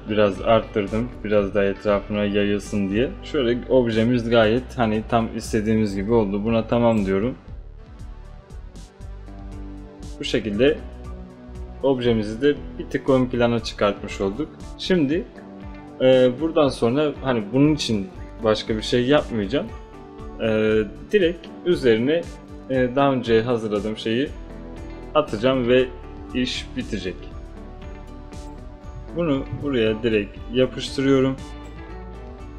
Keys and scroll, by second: 29.5 ctrl+space, 29.6 ctrl+v.